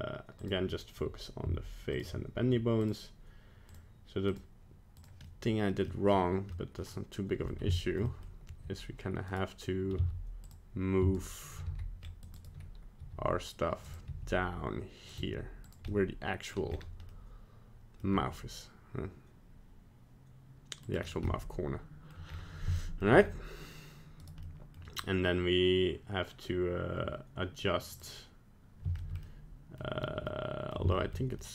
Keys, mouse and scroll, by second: 0.4 click, 1.9 shift+click, 2.1 shift+click, 2.8 click, 4.3 click, 5.2 middle click, 5.9 middle click, 6.5 middle click, 6.9 middle click, 7.7 shift+middle click, 7.9 shift+middle click, 8.1 middle click, 8.5 g, 10.0 z, 11.2 shift+right click, 11.6 c, 13.0 g, 14.1 r, 15.2 g, 15.9 middle click, 16.7-17.2 scroll up 2, 17.2 middle click, 18.1 g, 21.0 scroll down 3, 21.3 middle click, 22.1 middle click, 22.3-22.6 scroll up 2, 22.8 shift+middle click, 22.9 shift+middle click, 23.2 scroll up 1, 24.2 right click, 24.4 middle click, 27.9 click, 29.0 shift+middle click, 29.2 middle click, 29.4 shift+middle click, 30.3 middle click, 30.5 shift+middle click, 30.9 shift+middle click, 31.4 middle click.